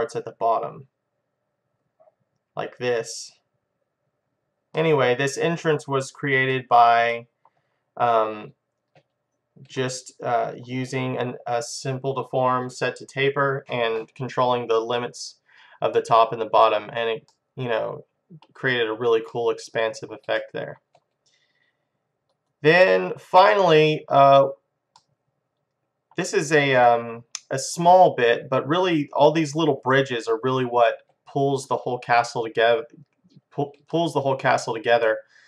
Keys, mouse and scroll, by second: 4.6 click, 5.0 middle click, 5.3 click, 5.8-8.0 middle drag, 8.1-10.0 middle drag, 10.1-11.6 middle drag, 16.0-19.2 middle drag, 19.3-22.3 middle drag, 23.6 click, 25.0-28.6 middle drag, 30.6 click, 31.8-33.4 middle drag, 34.0-35.4 middle drag.